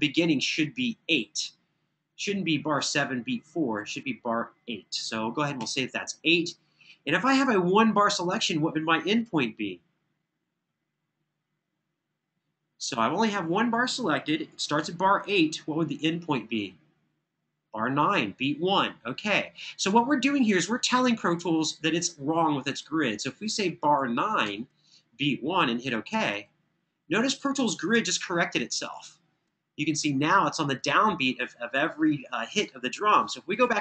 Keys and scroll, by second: 5.4 8, 24.2 9, 27.8 super+[, 28.7 super+[.